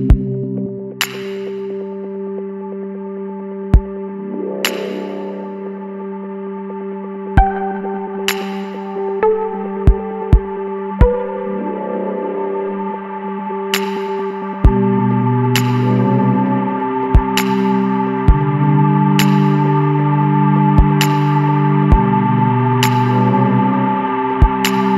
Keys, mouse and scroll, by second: 0.2 click, 0.9 click, 1.4 click, 2.4 Tab, 3.2 Tab, 4.4 scroll down 1, 4.4 middle click, 4.8-5.8 scroll up 2, 6.8 click, 7.5-9.1 middle drag, 9.1 click, 9.9 Tab, 10.6 Tab, 13.3 click, 13.7 click, 14.5 click, 15.1 click, 15.9 Tab, 16.5-16.8 middle drag, 16.8-17.2 scroll up 1, 17.2 middle drag, 17.4-18.0 scroll up 2, 17.8 shift+middle drag, 18.0 Tab, 18.3 middle click, 19.2 scroll down 2, 19.3 middle click, 19.9-20.8 scroll up 1, 20.8 s.